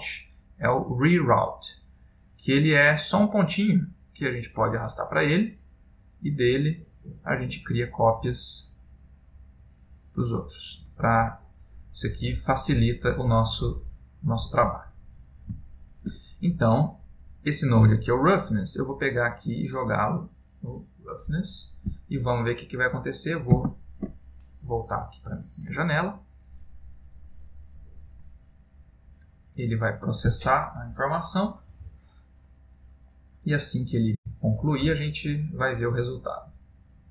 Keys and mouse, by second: 23.8 ctrl+space.